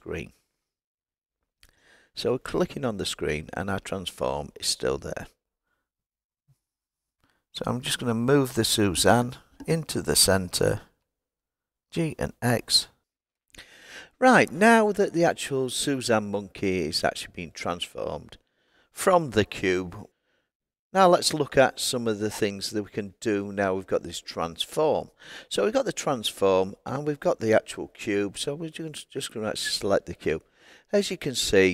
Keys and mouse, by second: 0.4 click, 8.2 click, 10.9 g, 20.1 click, 28.9 click.